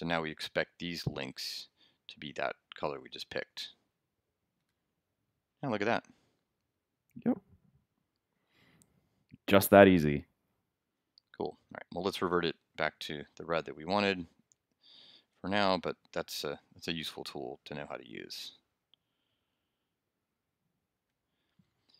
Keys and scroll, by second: 0.1 super+s, 4.6 super+r, 12.1 super+Tab, 13.9 super+z, 20.9 super+s.